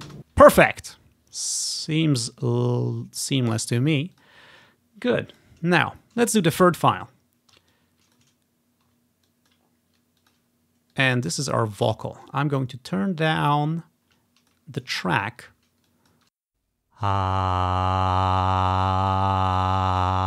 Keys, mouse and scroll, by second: 0.1 space, 1.0-1.6 ctrl+scroll down 1, 3.4-7.0 drag, 7.1 ctrl+scroll up 1, 7.8 click, 8.5 scroll down 1, 8.7 scroll up 1, 9.4 click, 10.1-17.3 drag, 16.4 space, 16.6-17.8 ctrl+scroll up 1, 19.6-20.2 drag.